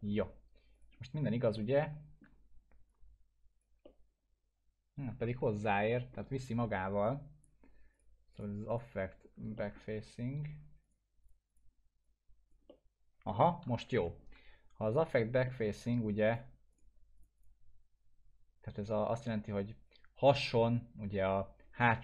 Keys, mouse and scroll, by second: 0.7 click, 1.5-2.5 alt+middle drag, 2.9-3.8 click, 3.8-5.1 alt+middle drag, 5.3 scroll up 1, 5.7 ctrl+z, 7.3-7.6 drag, 9.6 alt+middle click, 10.8 click, 12.7-13.6 alt+middle click, 13.8 ctrl+z, 14.8 click, 15.4 alt+middle click, 16.3 click.